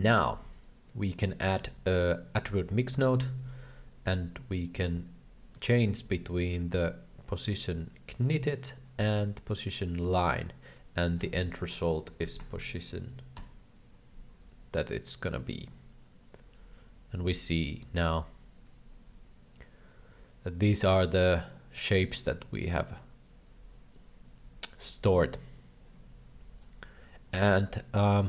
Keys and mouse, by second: 0.0 shift+middle click, 0.3 shift+a, 3.4 middle click, 5.9 ctrl+c, 6.7 ctrl+v, 7.7 click, 8.6-9.9 drag, 11.0 ctrl+v, 11.0-14.3 drag, 16.0-28.2 drag.